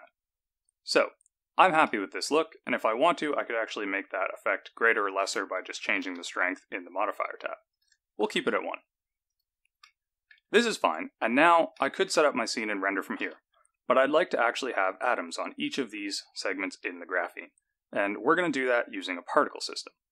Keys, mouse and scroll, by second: 1.3-1.8 scroll down 1, 1.8 middle click, 3.2 click, 5.0 click, 7.7 click, 9.2 click, 9.8 middle click, 11.7 shift+middle click, 13.2 n, 17.7-19.5 scroll down 1.